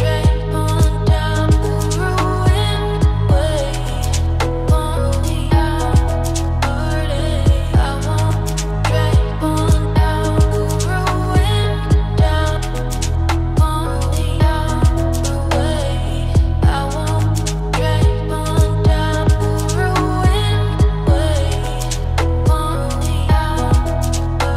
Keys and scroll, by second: 3.1 ctrl+space.